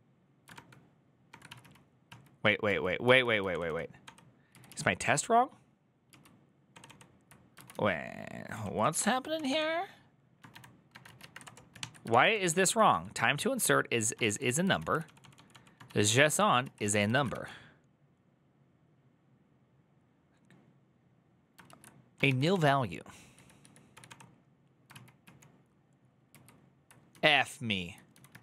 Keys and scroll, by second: 0.3 ctrl+^, 1.0 ctrl+^, 1.3 ctrl+o, 1.4 ctrl+o, 2.4 ctrl+o, 2.8 ctrl+i, 3.3 ctrl+d, 3.4 ctrl+d, 7.5 ctrl+u, 7.5-17.1 typing, 11.8 ctrl+c, 16.4 ctrl+c, 16.9 ctrl+a, 21.4 ctrl+a, 22.3 ctrl+c, 22.3-24.4 typing, 24.7 ctrl+o, 26.6-28.4 typing.